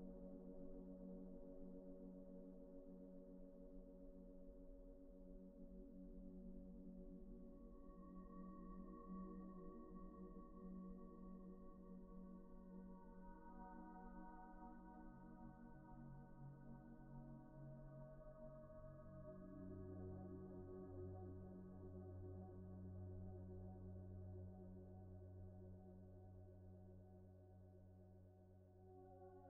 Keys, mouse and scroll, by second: 0.4 alt+z, 1.2 double click, 1.9-2.3 scroll down 1, 2.3 middle click, 4.7-5.5 scroll up 1, 5.5-6.6 scroll down 1, 7.9 shift+middle click, 9.5 scroll up 1, 9.8 shift+middle click, 13.6 a, 19.4-19.8 scroll up 1, 19.9 a, 22.3-22.7 scroll up 1, 22.7 a.